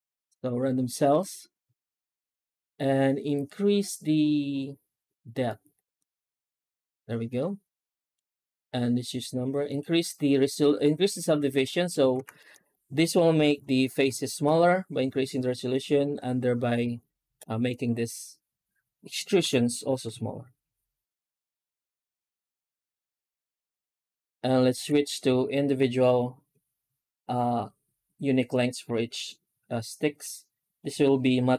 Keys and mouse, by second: 11.5-11.8 middle drag, 12.0 alt+shift+z, 12.2 middle drag, 12.6-12.9 middle drag, 13.8 F9, 19.3 F9.